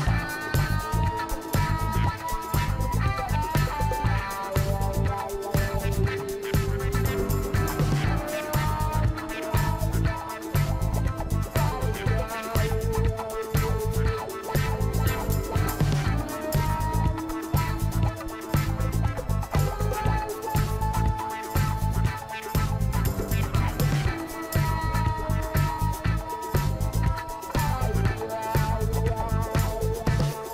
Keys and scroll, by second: 27.6 ctrl+Return, 29.3 ctrl+d.